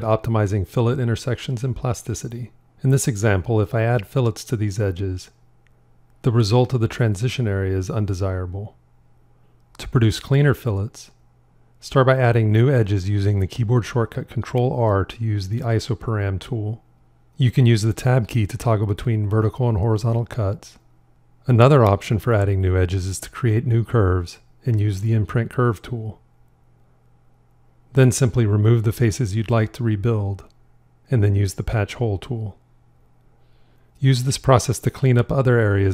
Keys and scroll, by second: 10.8 ctrl+r, 11.7 Tab, 24.9 shift+i, 29.1 shift+x, 35.6 shift+i.